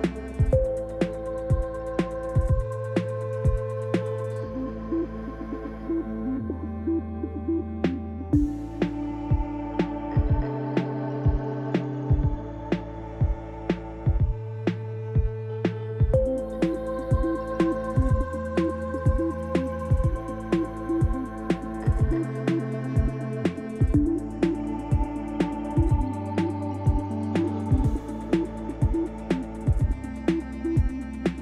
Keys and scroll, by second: 0.5 r, 2.7 shift+z, 3.8 f, 5.4 3, 11.9 j, 13.9 j, 18.6 g, 21.3 Tab, 24.3 r, 29.3 Tab, 30.2 ctrl+r, 31.0 Return.